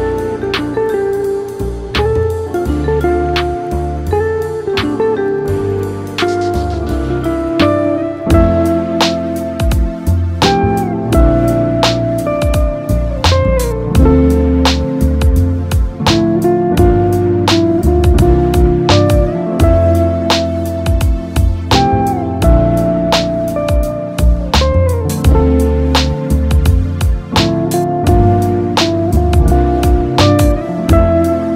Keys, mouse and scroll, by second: 2.1-2.7 scroll up 4, 2.7-4.0 shift+middle drag, 4.0 Tab, 5.7-6.8 scroll down 1, 6.8 s, 9.9-11.3 drag, 12.7 shift+click, 13.4-16.1 middle drag, 16.1 ctrl+p, 19.4-20.1 middle drag, 20.1-20.5 scroll down 2, 20.5-22.2 shift+middle drag, 22.2 click, 23.6-26.7 drag, 27.2 s.